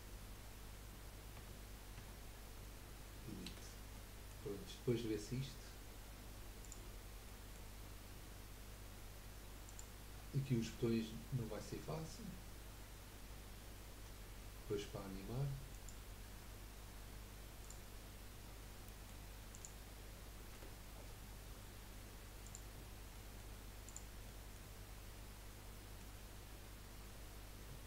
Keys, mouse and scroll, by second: 1.3 Tab, 2.0 Tab, 3.4 Delete, 3.9-4.5 middle drag, 4.5-5.5 scroll down 7, 6.6 click, 7.2-9.6 middle drag, 9.6 click, 10.1-11.5 scroll up 3, 15.7 click, 17.6-18.0 drag, 18.0-18.8 scroll down 9, 18.8-19.5 middle drag, 19.5 click, 20.5 Delete, 20.9-21.5 scroll up 2, 21.5-22.5 scroll up 2, 22.5 click, 22.8-23.1 scroll up 3, 23.1-23.8 middle drag, 23.8 click, 24.2-27.8 middle drag.